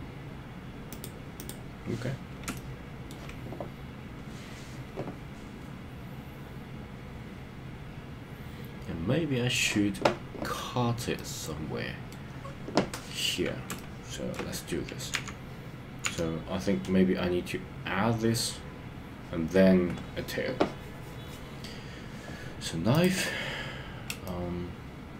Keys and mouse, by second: 1.1 click, 2.5 shift+middle click, 11.1 middle click, 13.8 shift+middle click, 15.1 KP_1, 16.2 KP_3, 24.3-25.1 shift+middle drag.